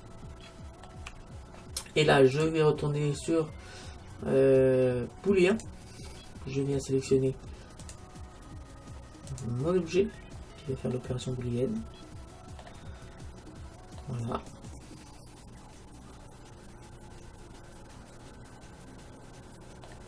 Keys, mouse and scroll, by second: 0.0-1.7 middle drag, 2.4-4.3 drag, 7.9-9.8 drag, 11.0-12.9 middle drag, 13.1-15.6 middle drag.